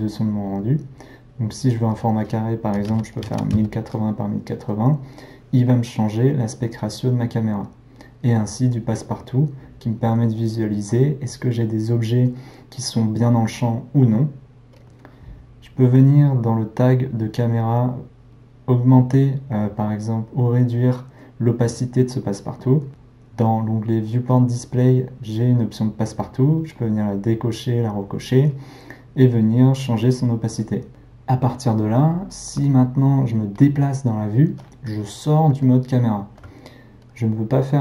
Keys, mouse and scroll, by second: 3.5-19.3 drag, 26.6-33.6 drag, 33.6-37.8 middle drag.